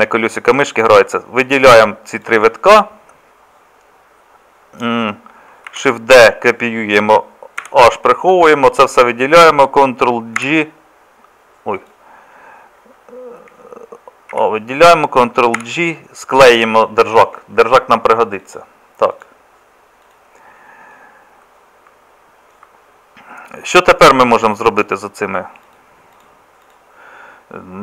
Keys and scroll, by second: 5.7 shift+d, 7.6 h, 10.4 ctrl+j, 14.3 a, 15.6 ctrl+j.